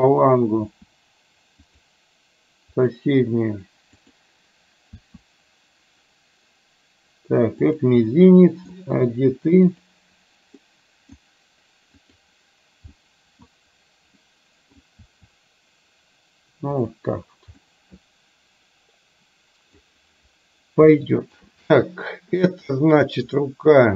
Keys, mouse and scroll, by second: 0.8 r, 2.8 click, 4.0 click, 5.1 r, 8.2 middle click, 9.8 click, 10.7 middle click, 12.1 click, 13.1 middle click, 14.3 middle click, 15.1 r, 17.7-20.0 middle drag, 21.0-21.5 shift+middle drag, 23.5-23.9 middle drag.